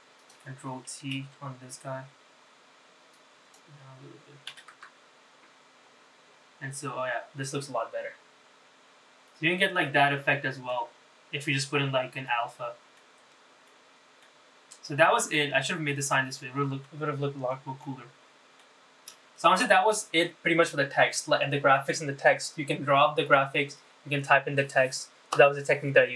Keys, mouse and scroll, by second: 0.0 click, 2.9-4.5 drag, 9.7 click, 12.1 click, 13.4 click, 16.1 click, 17.5 click, 18.8 click.